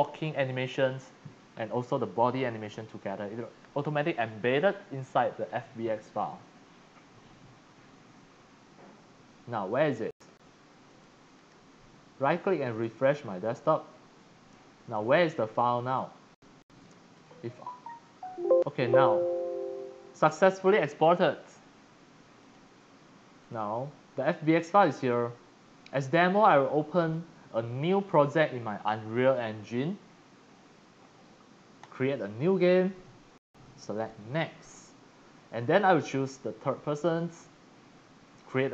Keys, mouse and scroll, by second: 10.9 click, 11.4 right click, 12.7 click, 14.9-15.9 drag, 17.2 click, 22.4 click, 23.4 click, 25.1 click, 31.8 click, 33.0 click, 36.9 click.